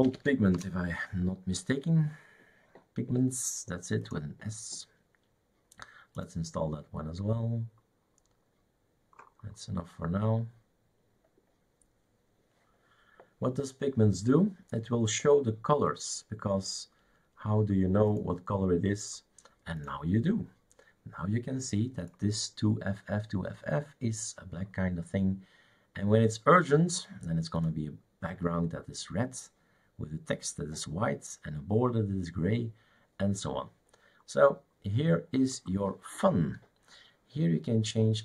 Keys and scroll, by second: 0.0-0.8 typing.